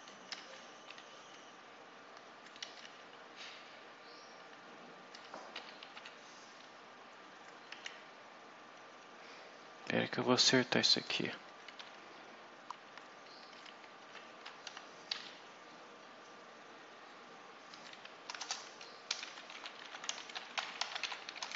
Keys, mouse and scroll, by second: 0.3 Right, 0.8 0, 2.1 Left, 2.7 Delete, 5.2-6.3 typing, 7.2 Left, 7.6 Delete, 9.4 Left, 11.0 Left, 11.8 Right, 12.0 Left, 13.9 shift+End, 14.0 shift+Left, 14.6 shift+Delete, 15.0 shift+Up, 17.6 Down, 17.8 End, 18.3 Return, 18.7-21.5 typing.